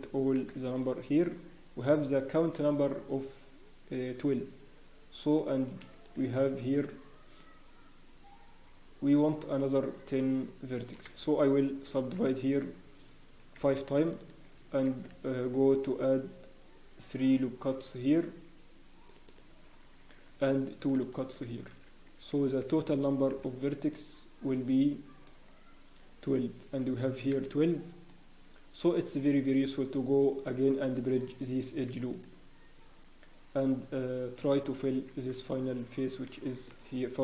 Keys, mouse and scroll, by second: 0.4 b, 6.0 shift+middle click, 12.2 ctrl+r, 14.2 click, 14.8 ctrl+r, 20.0 ctrl+r, 21.0 click, 21.6 a, 22.3 alt+a, 23.3 b, 30.7 click, 31.2 right click, 32.9 scroll up 1, 34.5 click, 35.3 alt+click, 36.4 shift+click.